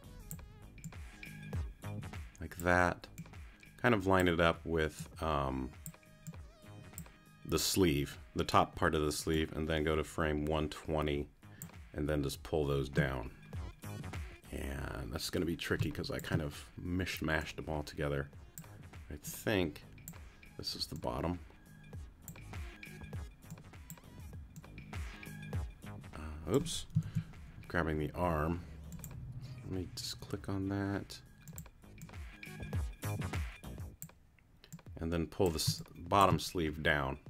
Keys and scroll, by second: 15.8 space, 27.0 super+z, 35.7 space.